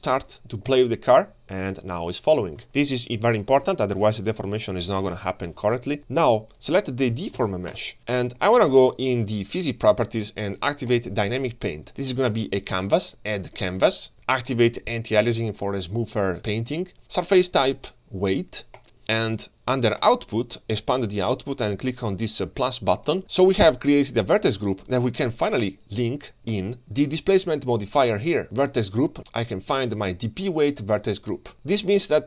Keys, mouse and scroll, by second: 0.2-2.6 drag, 4.5 click, 5.1 KP_3, 5.8-6.6 scroll up 3, 6.6 click, 6.6-7.0 scroll up 1, 7.0 g, 8.0-8.3 shift+scroll down 1, 8.3 shift+middle click, 8.8-9.2 scroll up 1, 10.1 click, 10.9 click, 12.9 click, 14.5 click, 15.6-17.5 scroll down 1, 17.5-19.0 drag, 17.5-18.8 scroll down 1, 20.0 click, 20.4-23.1 scroll down 2, 23.1 click, 23.1 scroll down 1, 26.5 click, 29.2-32.2 drag.